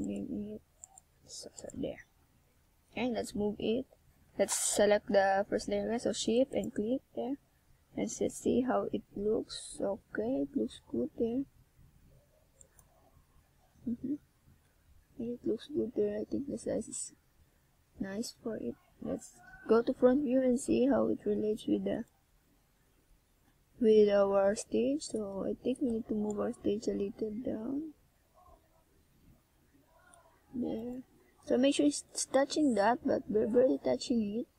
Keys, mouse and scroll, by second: 3.7 e, 8.7 click, 8.9 e, 9.7 click, 9.8 e, 10.8 click, 10.9 e, 11.9 e, 13.0 click, 13.2 e, 14.7 click, 15.1 e, 16.5 click, 16.7 e, 17.9 click, 18.0 e, 19.1 click, 19.6 e, 21.0 click, 21.2 e, 22.3 click, 24.1 click, 24.7 e, 26.2 click, 28.6 e, 29.9 click, 29.9 e, 30.9 click, 31.3 e, 32.3 click, 32.5 e.